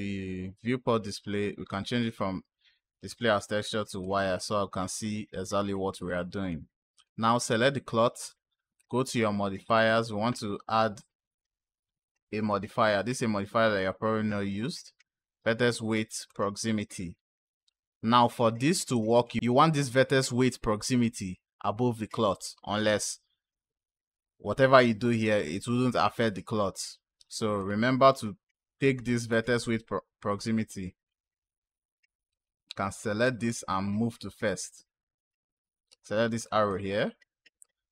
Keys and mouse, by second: 2.9-4.0 drag, 5.8 click, 6.8 click, 8.6 click, 9.5-16.3 drag, 18.8 click, 27.4 click, 29.1-31.0 drag, 32.2-36.3 drag, 36.5-37.9 drag.